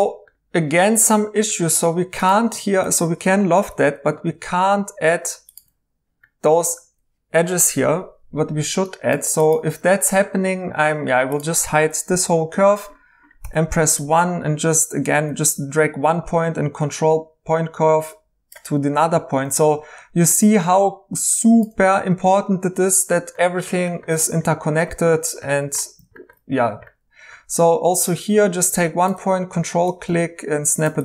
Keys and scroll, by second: 3.5 i, 9.6 Escape, 12.1 h, 13.4 1, 22.8 2, 27.4 1.